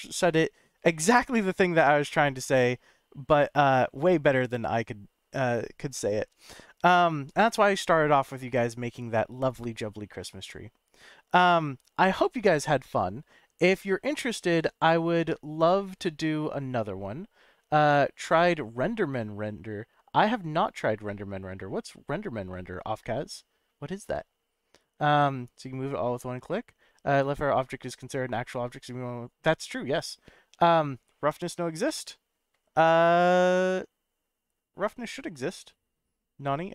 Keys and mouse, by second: 20.8-21.5 drag.